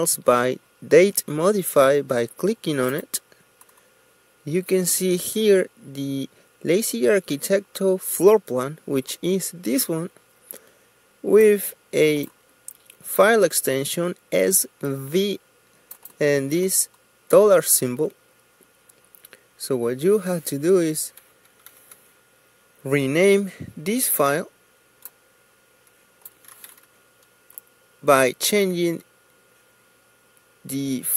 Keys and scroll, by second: 23.4 F2, 28.1 d.